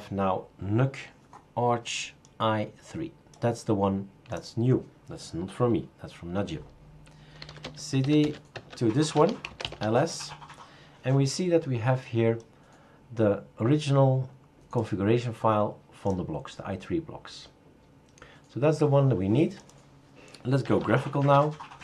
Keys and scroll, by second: 7.1-10.0 typing, 9.1 Return, 21.2 super+q.